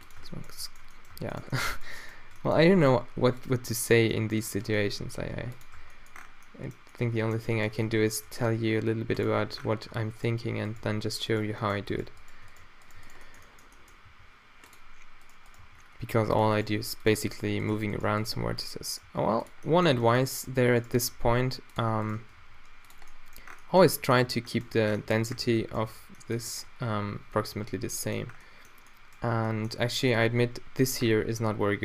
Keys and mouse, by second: 0.1-1.0 middle drag, 0.2 Tab, 1.1 Tab, 2.6 a, 2.8 b, 3.5 q, 4.7 g, 5.8 Tab, 7.9 Tab, 8.1 g, 9.3 drag, 9.4 Tab, 9.9 Tab, 10.8 g, 12.0 g, 14.1 g, 14.8-15.6 drag, 15.6 g, 16.6 g, 17.7 g, 18.3 g, 19.0 g, 19.7-21.7 middle drag, 20.9 d, 21.7 drag, 21.8-22.2 middle drag, 22.4 d, 23.1-23.9 middle drag, 23.9 Tab, 24.2 Tab, 24.9 a, 25.4 a, 25.8 a, 27.0 a, 27.4 a.